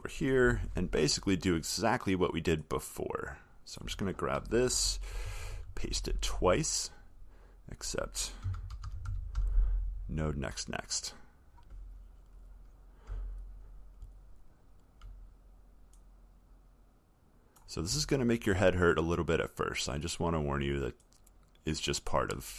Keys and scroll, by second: 5.0 ctrl+c, 5.6 ctrl+v, 5.7 ctrl+v, 14.3-14.9 alt+scroll, 14.9 alt+scroll, 18.4-19.1 alt+scroll.